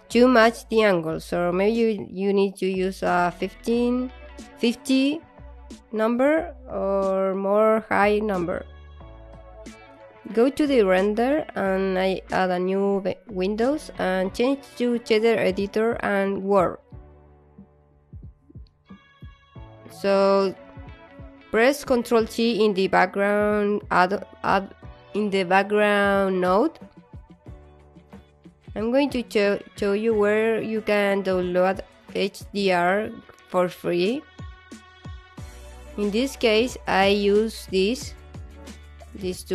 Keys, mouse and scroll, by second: 0.4 alt+middle click.